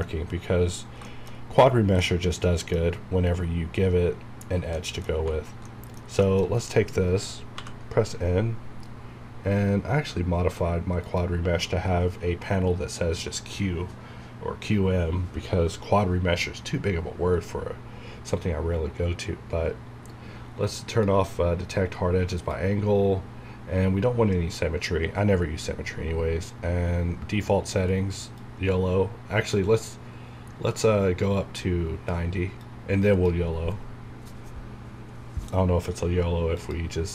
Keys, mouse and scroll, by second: 4.9 middle click, 5.4 scroll down 1, 5.7 middle click, 6.5-7.5 shift+scroll down 2, 7.6 n, 11.1 click, 20.9 click, 28.4-36.6 drag.